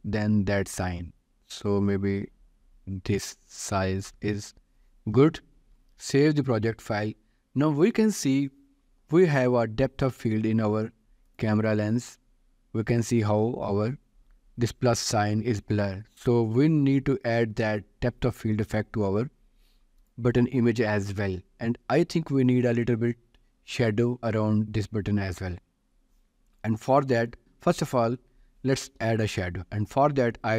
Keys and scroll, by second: 6.3 ctrl+s, 17.0 ctrl+s, 29.5 ctrl+s.